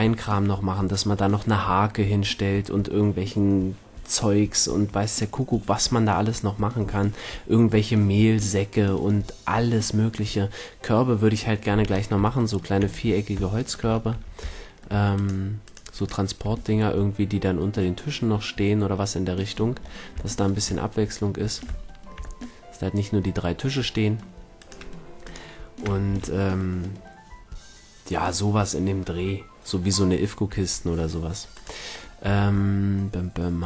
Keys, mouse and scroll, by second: 14.1 a, 16.4 a, 20.5-21.8 middle drag, 24.6-25.0 shift+scroll, 25.2-26.7 middle drag, 26.1 a, 26.7 click, 31.5-33.6 middle drag, 32.2 a.